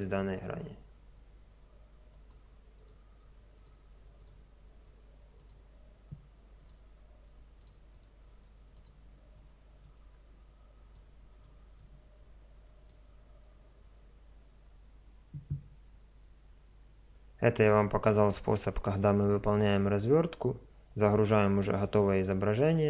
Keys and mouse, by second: 0.3 g, 2.8-6.7 right drag, 3.2 g, 4.8 g, 7.2 g, 8.3 g, 9.9 middle click, 10.5 middle click.